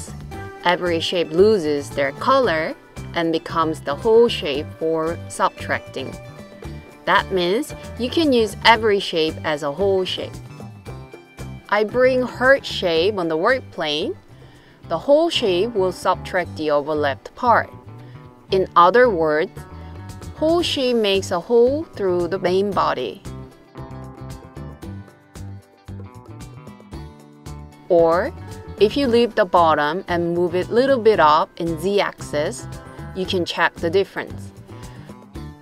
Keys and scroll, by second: 18.7 super+c, 19.0 super+v.